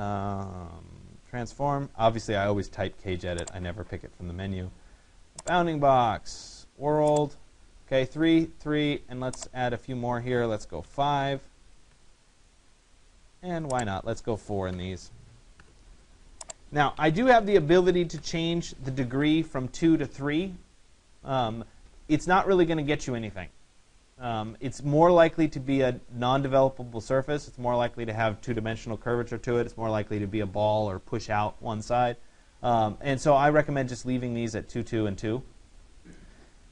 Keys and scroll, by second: 12.0 Return.